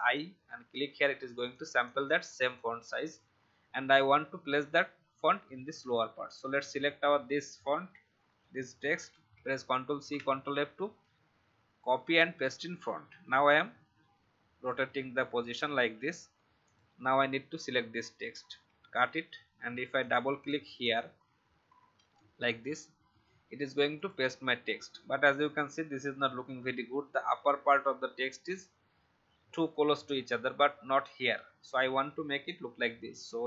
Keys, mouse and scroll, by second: 0.0-2.8 drag, 0.8 v, 9.1 ctrl+c, 9.9 f, 12.0-15.9 drag, 18.7 ctrl+x, 19.9 click, 21.9 ctrl+v, 23.9-26.1 drag.